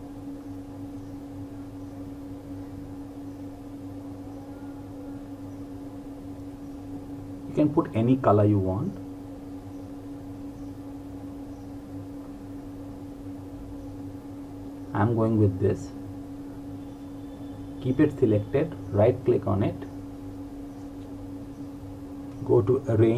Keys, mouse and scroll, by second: 20.4 click, 21.1 right click.